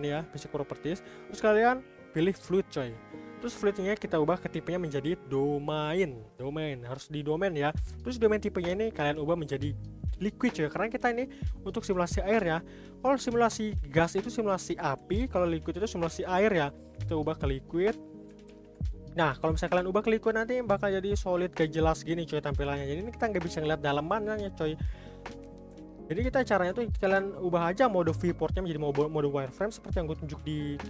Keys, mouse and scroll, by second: 9.2-12.4 drag, 18.5 ctrl+s, 19.9-23.6 middle drag, 25.4-25.9 scroll up 2, 25.9-26.2 shift+middle drag, 26.2 scroll up 1, 26.4 scroll down 1, 26.6-28.5 middle drag, 28.5 click.